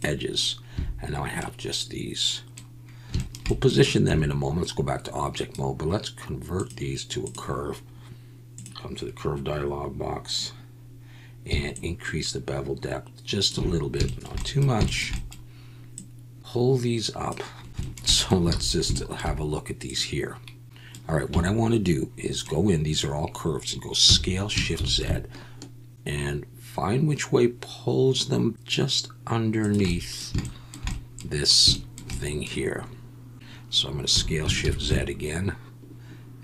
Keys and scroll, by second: 0.7 a, 4.1 Tab, 18.5 alt+a, 24.0 Tab, 24.0 s, 24.7 shift+z, 34.1 s, 34.6 shift+z.